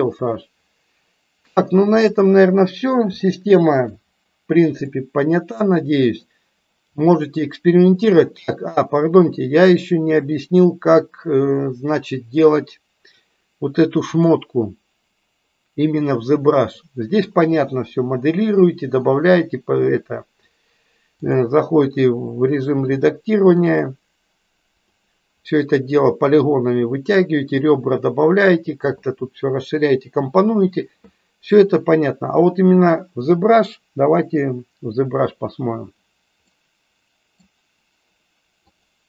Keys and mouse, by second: 1.9 click, 3.3-3.7 shift+middle drag, 4.9-6.1 middle drag, 14.0 click, 21.3 click, 22.9 middle click, 24.9 click, 25.4 middle click, 36.4 middle click, 38.7 click.